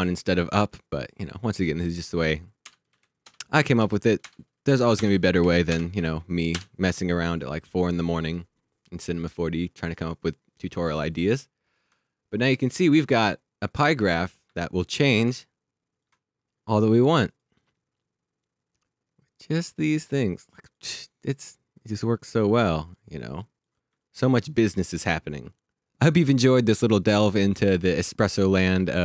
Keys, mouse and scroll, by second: 1.9 click, 2.6 Return, 2.9 Right, 3.2 BackSpace, 3.8 3, 4.2 Return, 4.6 Down, 4.9 Return, 5.4 Right, 5.7 BackSpace, 5.9 3, 6.5 Return, 10.3 click, 11.8 alt+click, 14.4 1, 14.5 click, 15.0 1, 15.1 1, 15.3 alt+click, 17.3 click, 19.5 click.